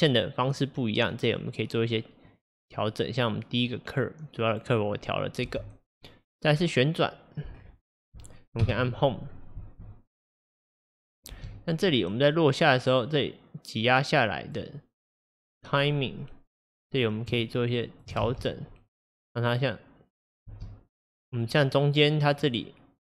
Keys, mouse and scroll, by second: 5.5 space, 6.5 click, 7.6 scroll down 1, 8.7 Home, 9.6 space, 11.4 space, 12.0-18.3 drag, 18.3 space, 20.6 space, 21.2-23.0 drag.